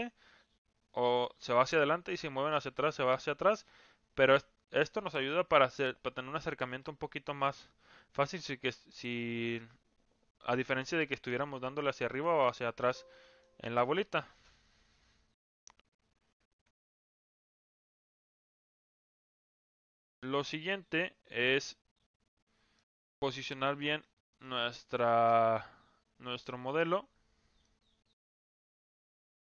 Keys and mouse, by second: 13.0-13.4 middle drag, 22.8 middle click, 26.6-27.6 drag, 28.8-29.4 middle drag.